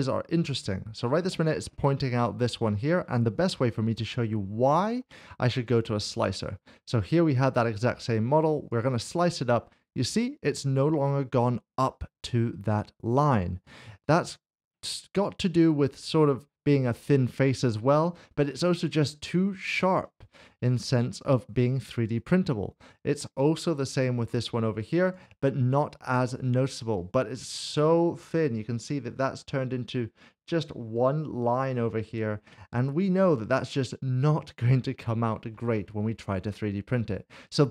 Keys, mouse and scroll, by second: 5.7 click, 8.7 click, 13.6 click, 20.8 click, 21.0 middle click, 22.2 click, 25.1 click, 27.3 click, 27.5 scroll up 1, 30.1 scroll up 1, 31.2 middle click.